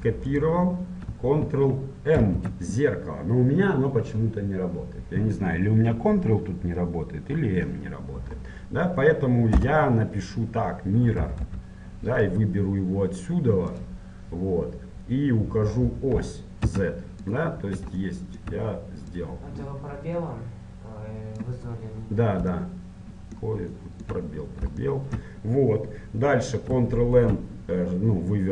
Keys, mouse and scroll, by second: 17.7-19.3 middle drag, 19.3-21.5 drag, 22.0-27.3 middle drag, 27.3 ctrl+n.